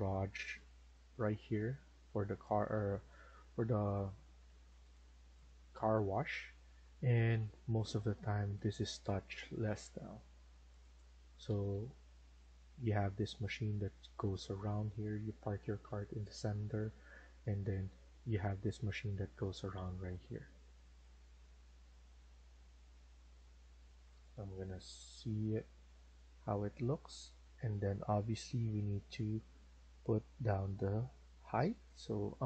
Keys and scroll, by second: 1.4 2, 2.3 Escape, 2.6 Escape, 6.3 Escape, 6.5 Escape, 7.5-8.2 typing, 11.0 Escape, 11.3 Escape, 11.6 Escape.